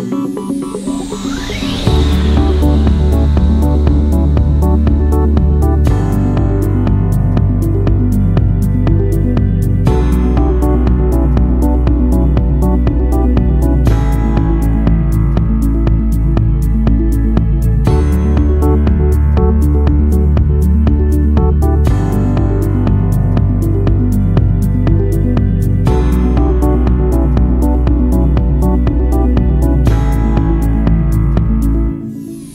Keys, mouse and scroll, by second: 9.9 click, 28.8 5, 29.7 BackSpace, 31.0-31.9 typing.